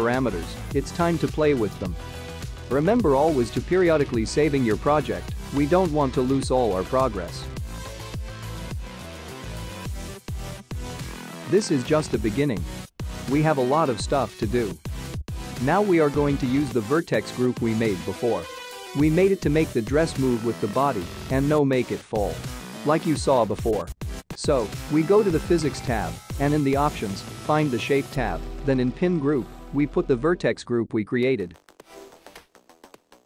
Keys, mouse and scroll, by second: 0.0-1.6 scroll down 4, 2.8 scroll down 2, 3.1 shift+middle click, 6.0 ctrl+s, 11.1 click, 11.7 space, 12.9 space, 14.5 middle click, 16.6 click, 17.6 middle click, 18.5-18.8 scroll up 3, 19.0 shift+middle click, 19.6 click, 20.5-22.3 scroll down 11, 24.0 click, 27.3-28.0 scroll down 1, 28.0-28.7 scroll down 13, 29.3 click, 29.6-31.2 scroll down 5, 31.2 click.